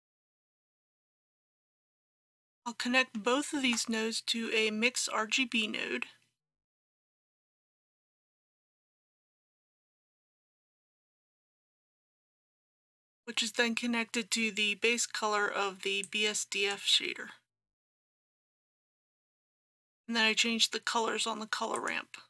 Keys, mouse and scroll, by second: 1.9 shift+a, 3.6 shift+a, 6.5-22.2 drag.